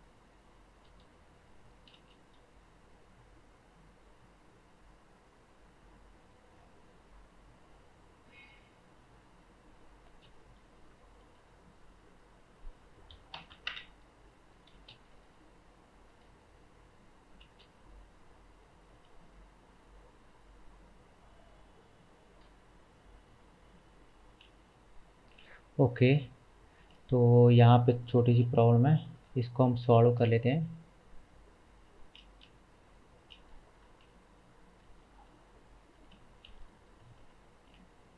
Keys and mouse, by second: 0.3-14.6 drag, 2.0 space, 10.1 space, 11.4 a, 13.5 KP_0, 14.6-20.2 middle drag, 14.8 space, 17.4 space, 20.2-26.1 drag, 25.4 Tab, 26.1 shift+middle click, 26.7 shift+click, 26.8 shift+middle click, 27.4 click, 28.2 middle click, 28.2 g, 33.9 g, 37.0 g.